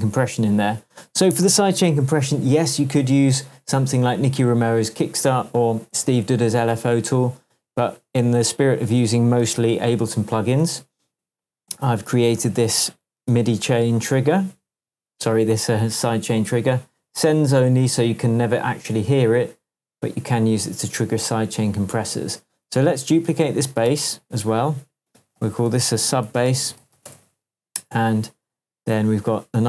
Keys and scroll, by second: 1.4 super+d, 9.5 super+s, 13.2 shift+Tab, 23.9 super+d, 25.4 super+r, 25.8-27.3 typing.